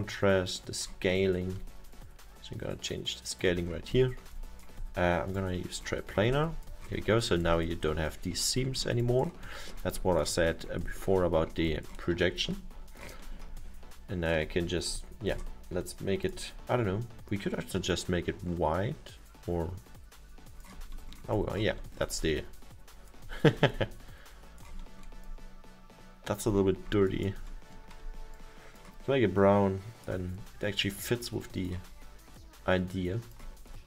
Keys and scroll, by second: 27.7 alt+7.